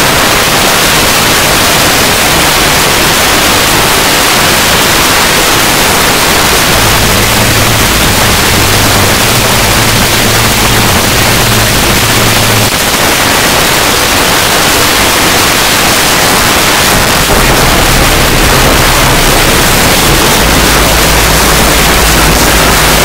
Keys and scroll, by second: 12.7 Page_Down.